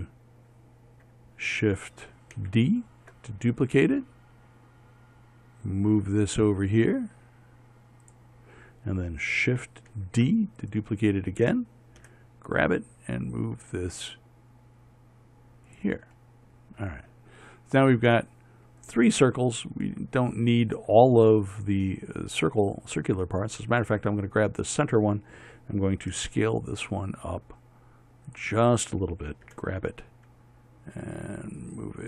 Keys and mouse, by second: 2.9 shift+d, 10.4 shift+d, 12.5 g, 17.9-24.4 middle drag, 26.6 s, 30.0 g.